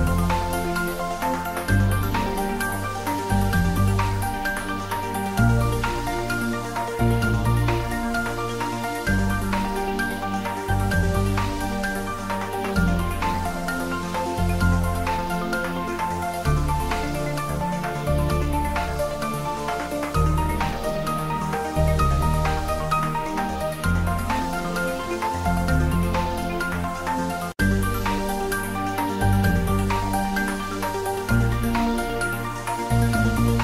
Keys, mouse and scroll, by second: 1.2 click, 1.4 ctrl+z, 2.0 Tab, 2.5 middle click, 2.8 shift+z, 4.2 middle click, 4.7 ctrl+r, 5.7 click, 6.4 f, 6.9 click, 7.0 Tab, 7.4 middle click, 7.9 Tab, 8.8 1, 9.7 ctrl+z, 10.3 Tab, 10.9-13.1 middle drag, 13.1 ctrl+s, 13.5 middle click, 14.4-15.6 ctrl+middle drag, 15.6 click, 15.9 shift+middle click, 16.3 shift+a, 19.0 click, 19.5-23.7 typing, 20.4 click, 21.3 click, 23.2 click, 24.1 click, 24.3 ctrl+middle click, 25.1 ctrl+middle click, 25.5 middle click, 26.2 s, 27.5 click, 27.6-28.5 typing, 28.8 click, 29.1 ctrl+middle click, 29.7 shift+middle click, 30.1 ctrl+middle click, 31.2 shift+middle click, 32.2 shift+middle click, 32.6 Tab, 33.4 s.